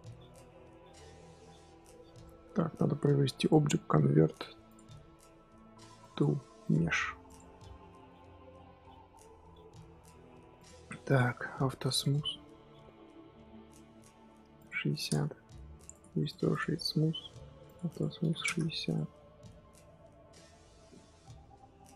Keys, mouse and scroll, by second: 0.9-2.1 scroll up 1, 2.1-6.6 middle drag, 7.3 click, 7.7-10.6 middle drag, 10.6 click, 11.1 click, 11.9 click, 12.4-15.0 middle drag, 15.0-15.9 drag, 16.5-17.6 right drag, 17.6-18.9 drag, 19.1 scroll down 1, 19.3-21.9 middle drag.